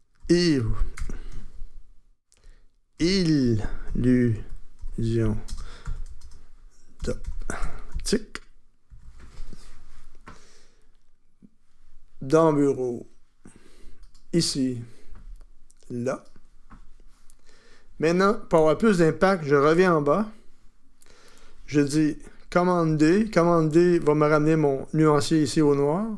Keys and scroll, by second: 0.2 shift+u, 1.0 shift+BackSpace, 2.7-9.7 typing, 22.9 d.